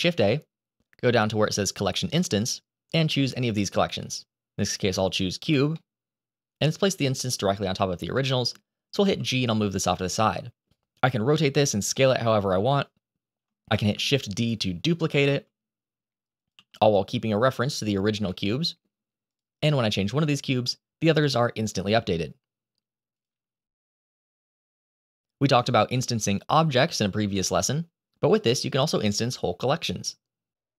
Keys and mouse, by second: 5.7-6.4 middle drag, 8.0-8.4 middle drag, 8.9 g, 10.2 middle drag, 10.8 r, 11.3 click, 11.7 s, 13.3-14.0 middle drag, 14.5 shift+d, 15.9 r, 16.1 z, 17.3 g, 17.7 click, 18.0-18.4 middle drag, 18.4 click, 19.0 click, 25.9-26.5 shift+middle drag, 28.8 shift+middle drag.